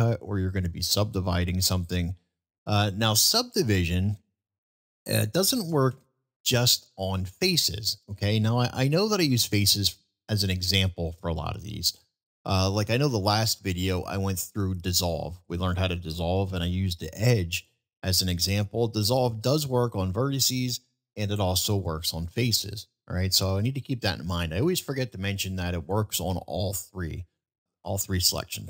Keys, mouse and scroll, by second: 3.1 shift+middle drag, 6.9-7.5 middle drag, 8.9-9.4 middle drag, 28.3-28.6 middle drag.